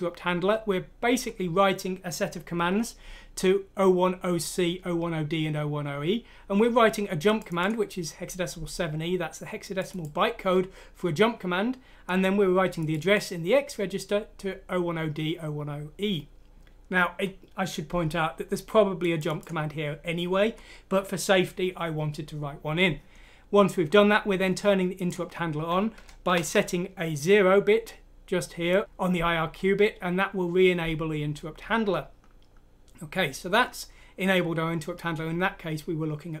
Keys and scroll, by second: 26.2 Right.